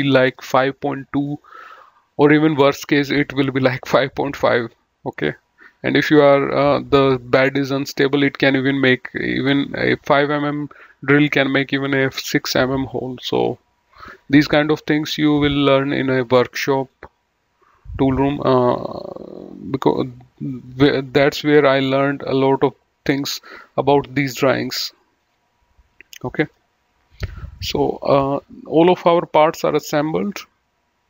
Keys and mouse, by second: 15.6 click, 17.6 click, 25.1 click, 27.5 middle click, 29.3 middle click.